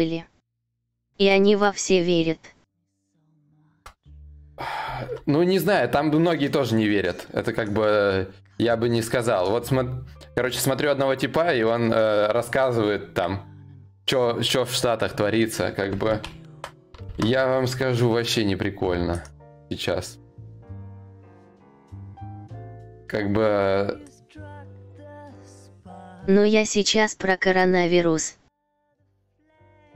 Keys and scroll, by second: 3.2 ctrl+shift+u, 16.1 ctrl+a, 16.7 ctrl+c.